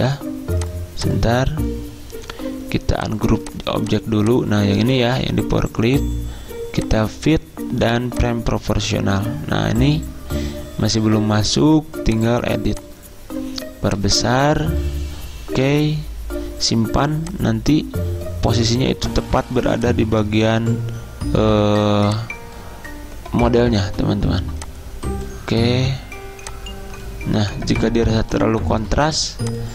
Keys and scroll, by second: 5.1 ctrl+z.